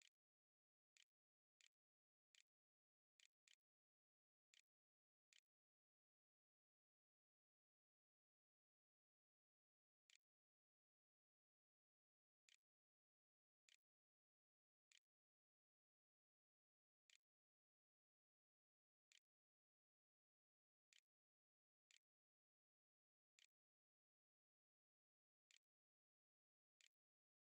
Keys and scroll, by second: 0.0-5.4 typing, 8.5-10.9 typing, 12.1-14.7 typing, 15.9-27.5 typing.